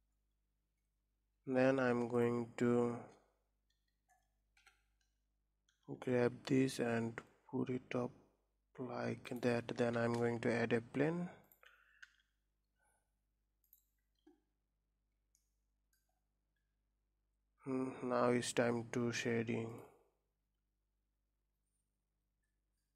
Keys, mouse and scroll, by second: 0.0 scroll up 1, 1.3-1.7 scroll down 3, 1.9 click, 4.3 KP_1, 5.1 scroll up 3, 5.6 g, 9.8 shift+a, 11.9 s, 14.7-15.1 scroll down 4, 15.1 middle click, 15.9-17.2 scroll down 7, 17.2 scroll up 2, 22.7-22.9 middle drag.